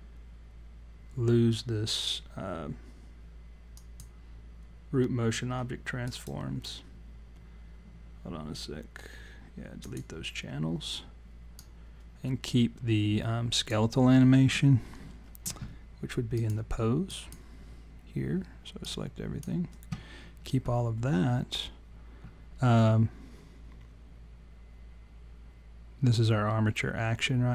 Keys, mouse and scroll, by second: 3.8 click, 6.1 right click, 11.6 click, 16.3 click, 18.8 click.